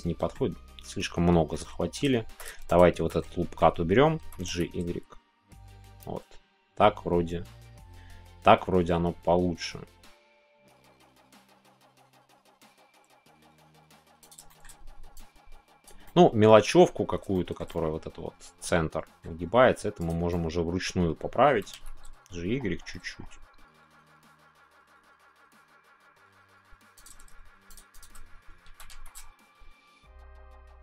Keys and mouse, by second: 1.5 middle click, 2.7 alt+shift+click, 3.2 middle click, 14.2 click, 14.5 shift+middle click, 15.3 click, 16.0 middle click, 17.3 shift+middle click, 17.7-19.2 middle drag, 20.3 middle click, 26.9 click, 27.9 shift+click, 29.1 shift+y.